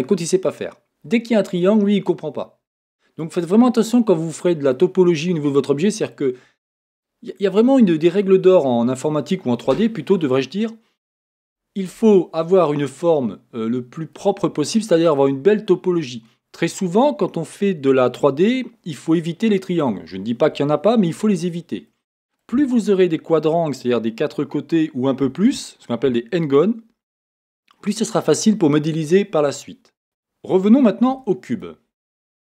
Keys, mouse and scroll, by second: 3.2-32.4 middle drag, 4.2-4.7 scroll up 1, 30.0 Tab, 31.1 x.